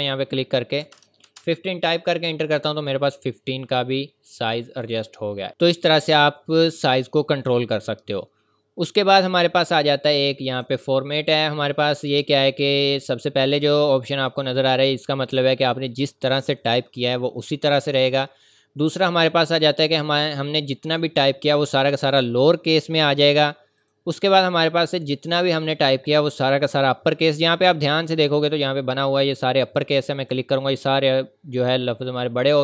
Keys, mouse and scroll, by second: 0.8 KP_1, 1.2 KP_Enter, 10.4 click, 21.7 click, 30.2 click.